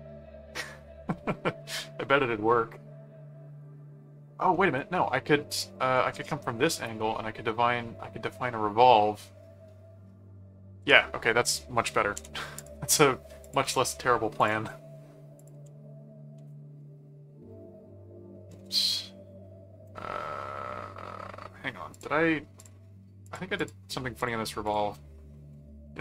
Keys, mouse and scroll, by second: 4.0 middle click, 6.2 middle click, 7.1 middle click, 12.6 click, 13.4 click, 14.3 click, 15.4 click, 16.4 Return, 17.2 ctrl+1, 18.6 ctrl+4, 21.9 click, 22.5 click, 23.2 click, 24.2 click.